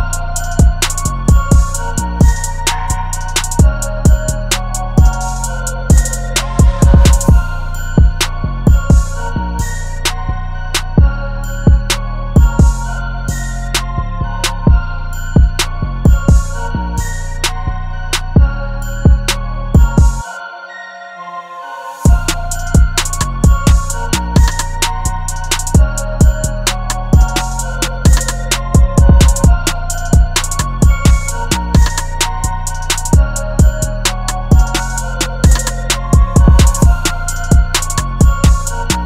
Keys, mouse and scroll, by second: 28.9 double click.